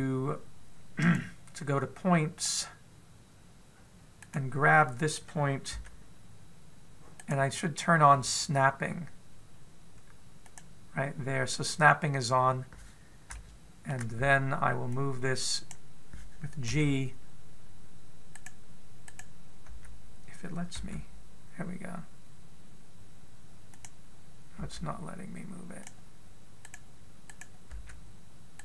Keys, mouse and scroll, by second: 1.8 right click, 3.2 click, 5.0 right click, 6.5 g, 11.2 click, 13.2-14.1 scroll up 4, 14.1 shift+middle click, 15.8 click, 17.4 g, 19.9 right click, 20.5 g, 25.3 g, 27.4 right click, 28.1 right click, 28.5 g.